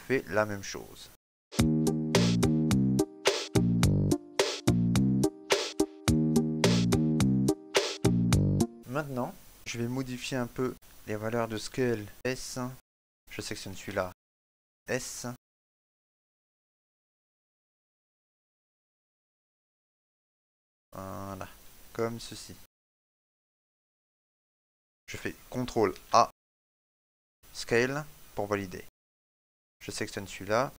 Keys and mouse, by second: 3.3 click, 3.3 shift+middle click, 3.3 f, 3.4 right click, 3.4 shift+middle click, 5.1 click, 5.1 middle click, 5.1 f, 5.2 right click, 7.4 shift+middle click, 7.4 click, 7.4 shift+middle click, 7.5 shift+middle click, 7.7 shift+middle click, 7.8 shift+middle click, 8.0 middle click, 8.0 right click, 8.2 shift+middle click, 8.4 shift+middle click, 8.6 right click, 8.6 shift+middle click, 9.1 shift+middle click, 12.1 click, 12.1 right click, 12.7 s, 14.3 right click, 16.1 s, 23.3 shift+middle click, 23.7 middle click, 25.2 shift+middle click, 25.5 middle click, 27.5 ctrl+a, 30.5 right click.